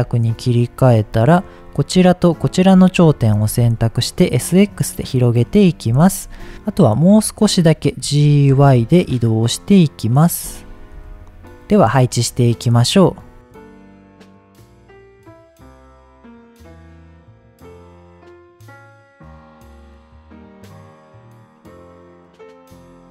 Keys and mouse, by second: 2.3 shift+click, 3.2 s, 3.5 x, 5.5 click, 6.7 click, 8.0 g, 8.5 y, 10.7 click, 10.9 Tab, 11.9 click, 12.3-12.7 middle drag, 13.6-22.0 typing, 14.3 click, 15.0 KP_Enter, 15.7 click, 16.1 click, 16.3 click, 16.6 click, 17.0 click, 17.2 middle click, 17.7 click, 18.4 shift+middle click, 20.4 shift+click, 20.7 click, 21.6 shift+click, 22.0 drag, 22.2 middle drag, 22.6 middle click.